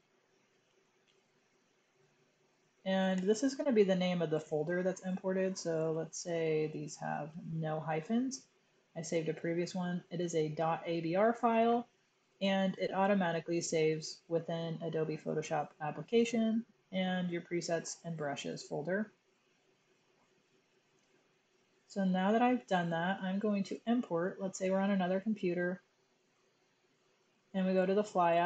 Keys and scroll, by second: 0.1-1.2 typing, 5.7 space, 6.8-7.5 typing.